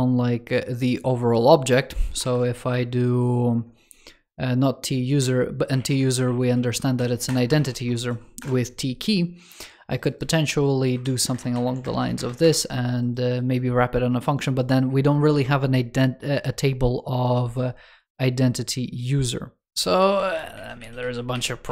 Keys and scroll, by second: 11.1 alt+BackSpace, 19.7 super+z.